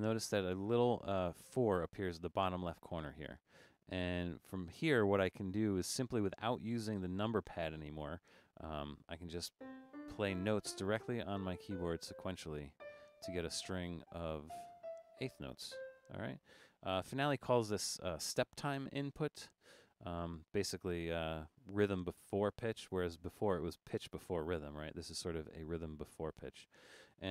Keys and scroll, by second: 17.0 0.